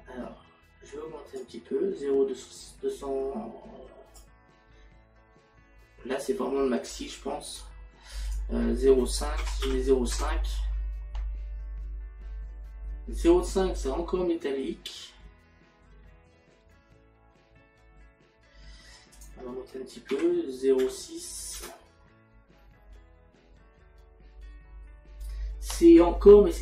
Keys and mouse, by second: 1.4 click, 8.3 click, 9.4 KP_Decimal, 19.2 click.